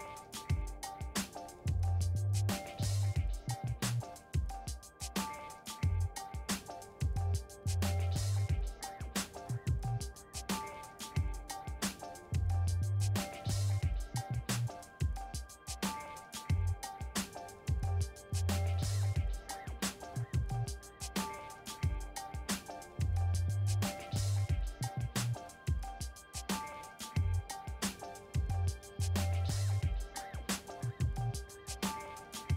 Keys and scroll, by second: 0.6 f, 1.1 d, 2.1 c, 2.6 9.